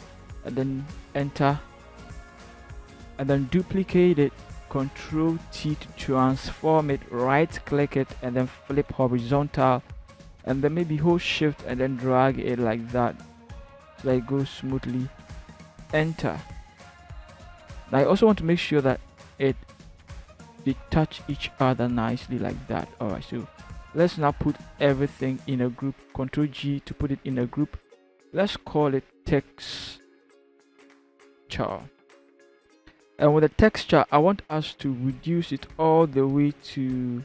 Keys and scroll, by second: 1.1 ctrl+shift+Return, 3.6 ctrl+j, 5.4 ctrl+t, 15.7 Return, 19.5 Left, 20.1 Left, 20.4 Left, 20.9 Left, 26.3 ctrl+g, 29.3-31.3 typing, 31.6 Return, 32.5 typing.